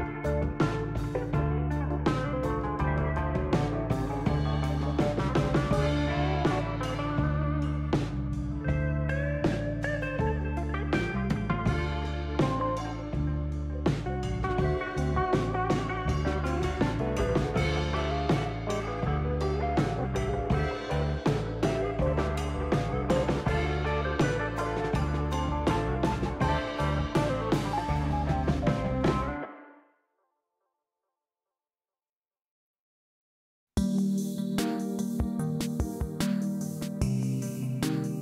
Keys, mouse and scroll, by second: 1.0 shift+s, 2.3 shift+s, 3.7 shift+s, 5.5 shift+s, 7.2 shift+s, 8.5 shift+s, 17.0 shift+s, 19.3 shift+s, 20.8 shift+s, 21.8 shift+s, 22.7 shift+s, 23.6 shift+s, 24.6 shift+s, 31.0 shift+s, 32.9 shift+s, 34.4 shift+s, 35.6 shift+s, 36.6 shift+s, 38.1 shift+s.